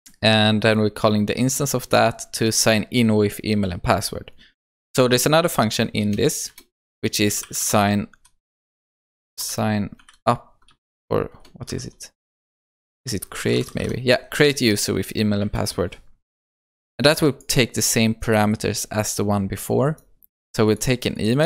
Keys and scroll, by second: 12.7 ctrl+BackSpace, 15.4 Return.